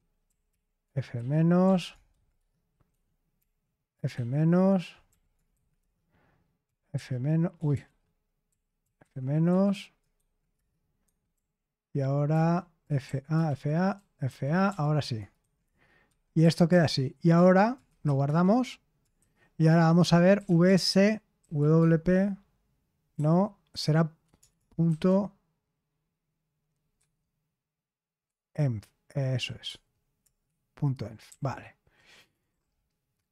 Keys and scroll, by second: 0.0-21.8 typing, 5.7 Return, 23.1-25.3 typing, 26.7-28.2 typing, 29.6-30.2 typing, 30.2 Return, 31.2-32.9 typing.